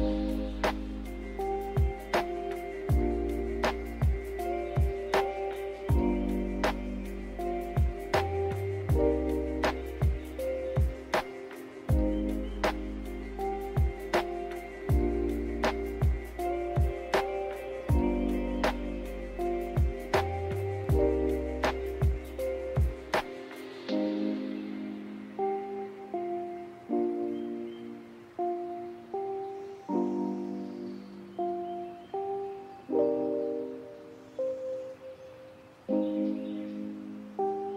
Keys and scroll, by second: 0.0-1.8 typing, 14.4 8, 14.5 Return, 34.7 z, 37.1-37.7 typing.